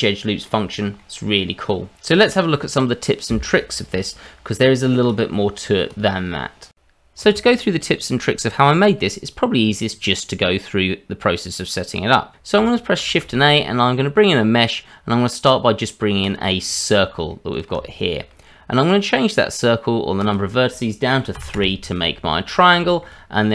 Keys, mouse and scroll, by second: 13.0 shift+a, 16.9-17.3 scroll up 2, 17.3 middle click, 17.8 shift+middle click, 20.2 click, 22.5 scroll down 2, 22.9 shift+middle click, 23.2 middle click.